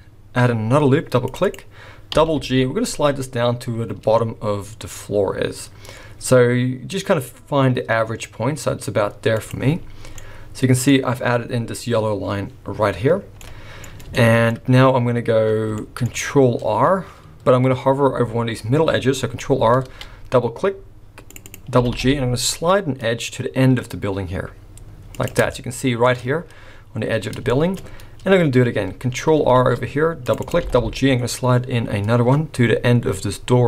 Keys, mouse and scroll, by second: 2.1 g, 9.9 scroll down 4, 10.2 middle click, 10.9-12.8 scroll up 3, 13.4 middle click, 13.4-13.8 scroll up 1, 14.1 shift+middle click, 15.5 scroll down 3, 15.8 shift+middle click, 16.2-17.2 shift+scroll up 2, 17.8 scroll up 2, 19.8 ctrl+r, 21.8 g, 25.5 shift+middle click, 26.1 shift+scroll up 1, 27.3 scroll down 3, 27.5 shift+middle click, 27.8-28.6 scroll up 1, 28.6 scroll up 1, 29.6 ctrl+r, 30.6 g.